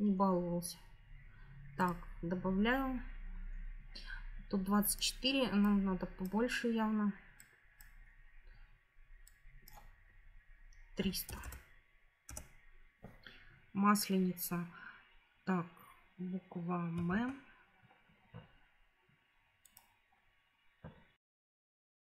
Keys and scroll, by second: 10.9 3, 11.2 0, 12.2 Return, 17.0 shift+v.